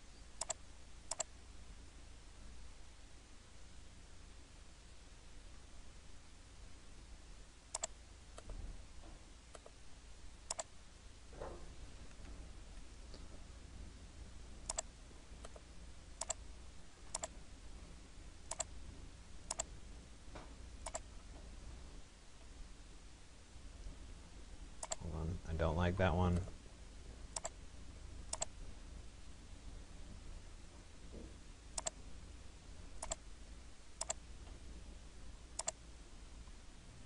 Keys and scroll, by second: 12.2 Escape, 21.7 Return, 25.8 Delete, 36.0 Return.